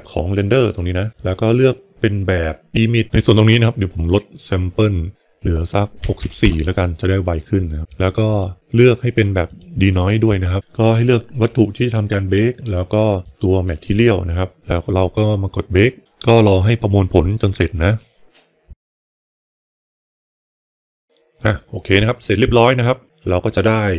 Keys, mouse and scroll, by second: 1.1-3.0 drag, 3.9-7.1 drag, 7.8 click, 8.1 click, 9.3 click, 13.2 click.